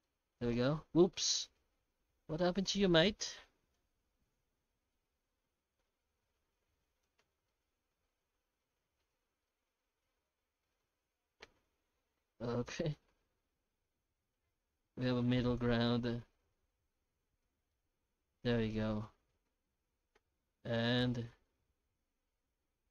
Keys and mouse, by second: 0.0-0.5 middle drag, 1.2 middle click, 3.8-7.0 drag, 7.6-8.6 middle drag, 9.1-9.4 middle drag, 9.8-10.8 middle drag, 11.5-12.6 middle drag, 13.7-17.4 drag, 17.8-18.4 middle drag, 19.0-19.4 middle drag, 21.1-22.9 drag.